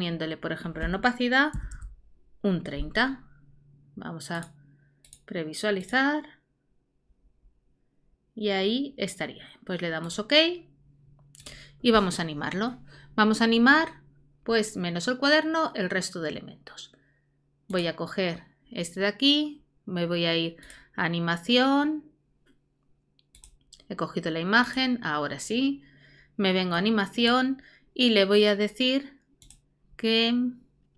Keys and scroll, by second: 1.3-2.2 typing.